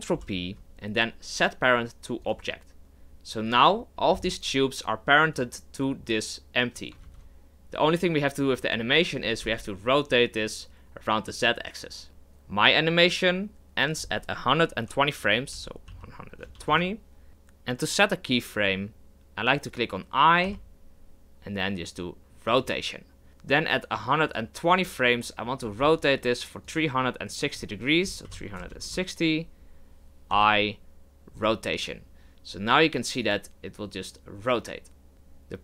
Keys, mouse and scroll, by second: 0.1 ctrl+p, 3.5-7.0 right drag, 7.0 ctrl+z, 9.2 r, 13.9-17.0 drag, 24.3-25.7 drag, 25.7 r, 27.4-30.3 drag, 33.2 click.